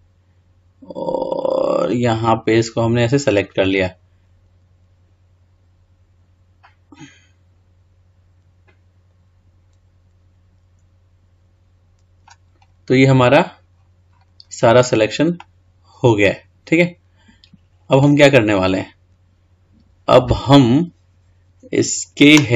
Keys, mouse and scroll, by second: 15.6-18.5 middle drag, 18.5-19.3 scroll down 3, 19.3 scroll up 1, 19.7 scroll down 1.